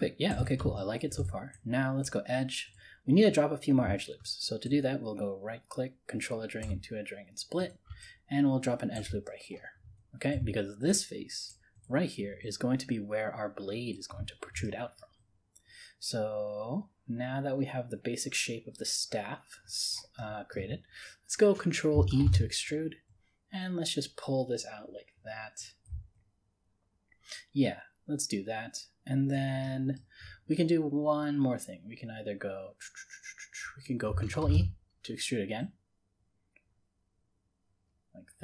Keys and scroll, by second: 22.3 ctrl+e, 34.4 ctrl+e.